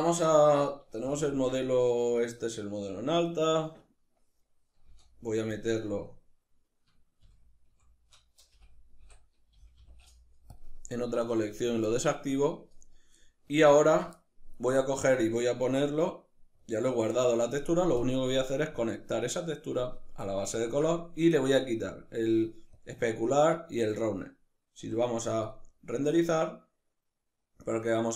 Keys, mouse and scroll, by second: 0.4 g, 1.8 right click, 4.2 m, 11.2 click, 12.1 right click, 12.5-15.9 middle drag, 15.9-18.2 drag, 19.6-21.2 middle drag, 21.2-27.3 drag, 24.2 z, 27.3-28.1 middle drag.